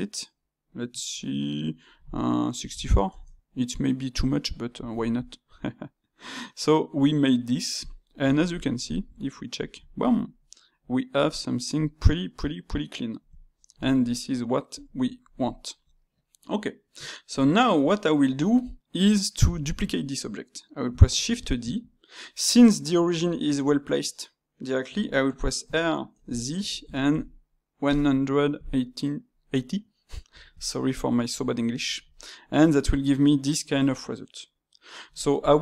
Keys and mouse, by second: 4.3-7.3 middle drag, 8.3-9.5 ctrl+middle drag, 9.5 click, 10.0-13.0 middle drag, 13.4-14.7 shift+middle drag, 14.7 click, 15.5-18.5 shift+middle drag, 19.5-21.1 drag, 21.1 shift+d, 22.2-25.3 middle drag, 30.6-35.1 middle drag.